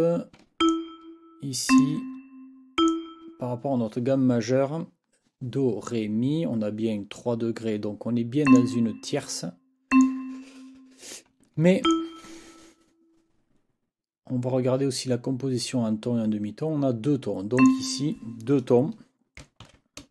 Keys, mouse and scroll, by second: 0.6 ctrl+click, 1.7 click, 2.8 shift+click, 8.4 click, 9.9 click, 11.8 shift+click, 17.6 click, 19.6 ctrl+t.